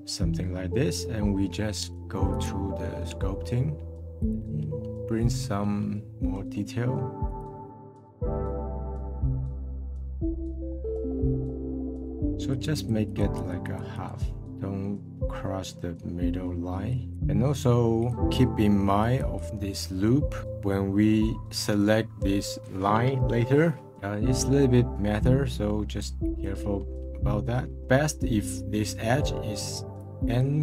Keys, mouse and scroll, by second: 0.0-2.3 middle drag, 2.3-4.3 drag, 4.3 scroll up 1, 4.9 scroll up 1, 5.2 middle click, 7.3 click, 7.7 scroll down 1, 8.0 f, 8.3 click, 8.6 middle click, 8.8 click, 9.3 middle click, 9.5 click, 9.7 middle click, 9.8 click, 10.1 middle click, 10.6 click, 10.9 middle click, 11.3 click, 11.5 scroll up 3, 11.7-15.3 drag, 15.3-16.9 scroll down 1, 16.9 click, 18.0 click, 19.0 click, 25.2-26.8 drag, 27.4 scroll down 1, 27.7 middle click, 28.5-29.7 middle drag, 29.7-30.6 drag.